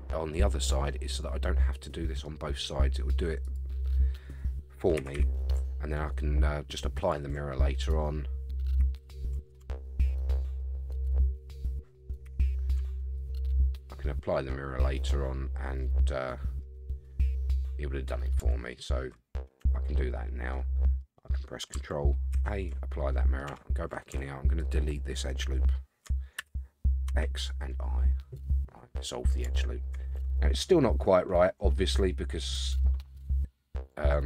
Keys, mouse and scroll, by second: 3.4 click, 5.0 g, 7.8 click, 8.8 g, 10.9 click, 12.2 g, 13.6-13.9 scroll down 4, 13.9-14.9 middle drag, 15.0-15.5 scroll up 2, 15.8 middle click, 18.6 shift+middle click, 19.6 Tab, 20.1-21.0 middle drag, 22.3 ctrl+a, 23.1 middle click, 23.1 scroll down 1, 23.5 Tab, 24.6 alt+click, 26.4 x, 28.1-29.4 middle drag, 29.6 shift+middle click, 30.1 Tab, 30.5-31.8 middle drag, 32.8-34.2 middle drag.